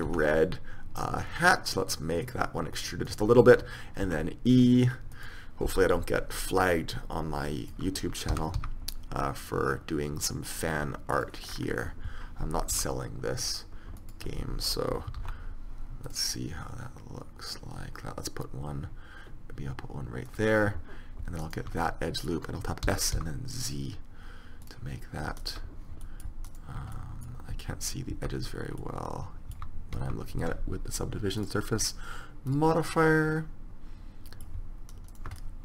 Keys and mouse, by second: 0.2 e, 4.2 e, 5.8 KP_3, 8.5 s, 11.6-13.7 middle drag, 12.9 r, 15.4 ctrl+r, 21.6 right click, 23.0 s, 28.3 z, 30.1 z, 33.9 middle click, 35.3 middle click.